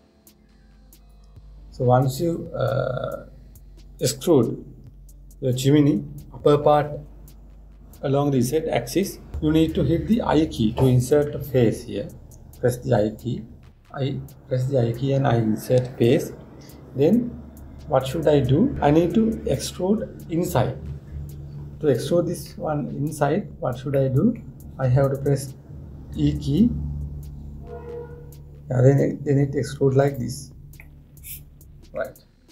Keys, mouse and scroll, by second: 23.8-24.6 scroll up 1, 24.6-26.8 middle drag, 26.8 e, 31.5-32.5 middle drag.